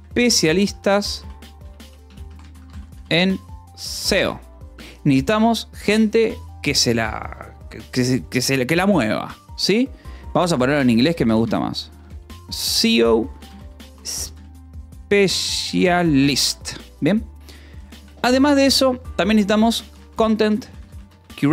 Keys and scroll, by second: 0.0-3.3 typing, 4.1 Escape, 4.6 h, 10.3-17.9 typing, 12.7 Escape, 19.8-21.5 typing.